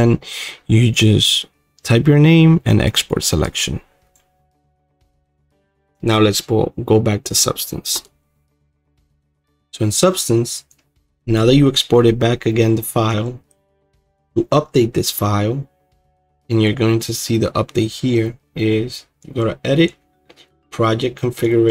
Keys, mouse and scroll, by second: 1.0-8.0 drag.